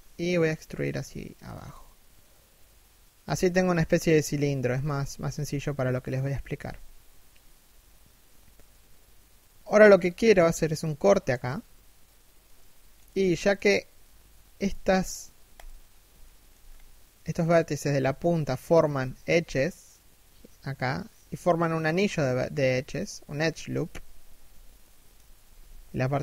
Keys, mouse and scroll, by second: 3.0 a, 3.3 middle click, 4.8 KP_3, 6.1 KP_1, 12.0 middle click, 13.0 alt+right click, 14.1 alt+right click, 15.0 alt+right click, 15.7 alt+shift+middle click, 16.1-16.8 scroll up 1, 17.7 alt+shift+middle click, 24.3 shift+middle click, 25.0 KP_3, 25.5 scroll down 1, 25.8 KP_1.